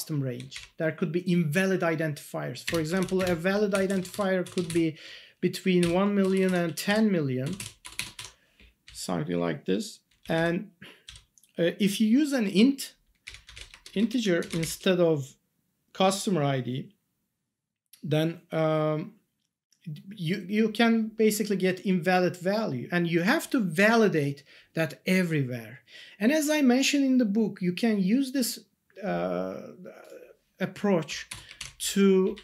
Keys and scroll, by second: 2.6-4.3 typing, 6.2-8.1 typing, 8.8 Left, 10.2 Down, 14.4 ctrl+Left, 31.8 ctrl+Down.